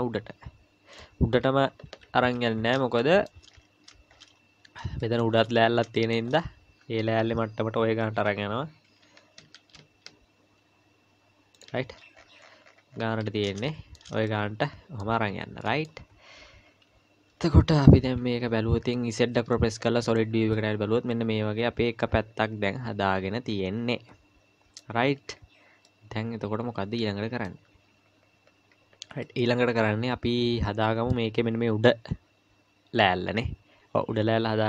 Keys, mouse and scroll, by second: 1.9 KP_Decimal, 2.6-3.0 scroll up 3, 3.0 shift+middle click, 3.5-5.0 scroll up 7, 5.0 shift+middle click, 5.4-7.8 scroll up 4, 6.0 shift+middle click, 7.8 scroll up 2, 9.0 g, 11.9-13.6 scroll down 22, 13.6 scroll down 2, 13.7 shift+middle click, 14.3 middle click, 15.1 Tab, 15.6 middle click, 17.3 KP_Divide, 17.9 KP_Divide, 18.9 middle click, 19.3 z, 20.5 middle click, 25.0 scroll up 1, 25.9 middle click, 25.9-28.2 scroll up 2, 28.2-28.9 scroll down 2, 29.2 middle click.